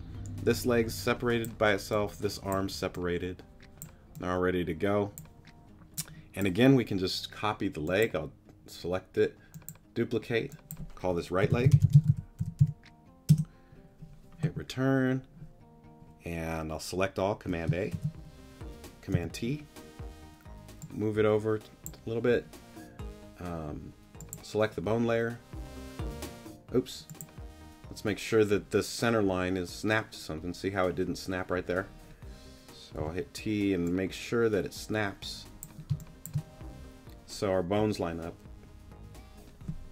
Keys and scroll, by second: 11.4-12.6 typing, 13.3 Return, 17.9 super+a, 19.1 t, 33.0 t, 35.9 space.